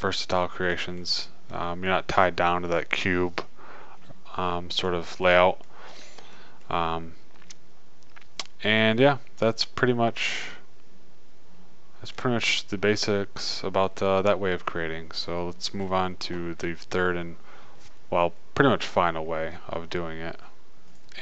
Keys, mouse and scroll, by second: 2.8-4.3 middle drag, 5.5-9.0 middle drag, 9.5-12.7 middle drag, 15.5-21.2 middle drag.